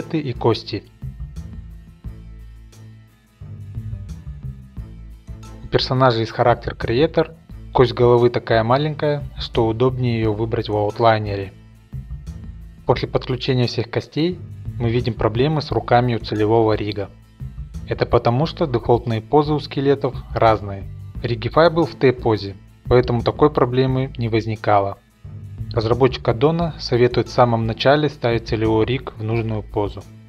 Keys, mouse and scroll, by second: 0.0 click, 0.0-0.4 scroll, 0.4 click, 0.5 click, 0.8 click, 0.9 shift+scroll, 1.0 click, 1.0 click, 1.1 click, 1.1 ctrl+Tab, 1.1 click, 1.3 shift+click, 1.4 shift+click, 1.4 click, 1.5 click, 1.6 shift+click, 1.6 ctrl+Tab, 1.7 shift+click, 1.8 click, 1.9 shift+click, 2.1 click, 2.2 shift+middle click, 2.2 middle click, 2.3 middle click, 2.4 shift+click, 2.5 click, 2.6 click, 2.8 shift+click, 2.8 middle click, 2.9 middle click, 2.9 click, 3.0 click, 3.0 shift+middle click, 3.1 shift+click, 3.2 middle click, 3.3 click, 3.5 shift+middle click, 3.6 shift+click, 3.6 click, 3.7 click, 3.8 shift+click, 3.8 click, 3.9 click, 4.0 middle click, 4.0 middle click, 4.1 shift+click, 4.2 click, 4.3 middle click, 4.3 click, 4.4 shift+middle click, 4.4 middle click, 5.0 click, 6.5 middle click, 7.1 click, 8.3 click, 8.6 click, 9.9 z, 10.3 middle click, 10.5 middle click, 10.5 middle click, 10.7 middle click, 10.8 shift+middle click, 10.8 shift+click, 10.9 click, 10.9 middle click, 11.1 middle click, 11.1 shift+middle click, 11.1 scroll, 11.3 middle click, 11.4 shift+middle click, 11.6 click, 11.6 middle click, 11.7 shift+click, 12.1 middle click, 12.2 scroll, 12.5-16.8 drag, 12.6 middle click, 17.4 click, 17.7 middle click, 18.2-19.7 drag, 19.8 alt+a, 20.0 alt+r, 21.1 alt+g, 21.5-24.6 drag.